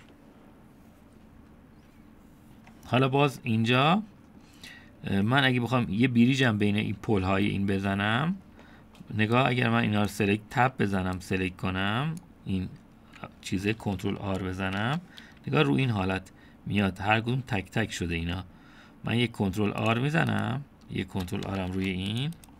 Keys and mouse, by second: 4.0-4.4 middle drag, 4.7-5.4 middle drag, 8.1-8.6 middle drag, 10.6-11.1 drag, 11.6 Tab, 12.2-13.2 drag, 15.6 ctrl+r.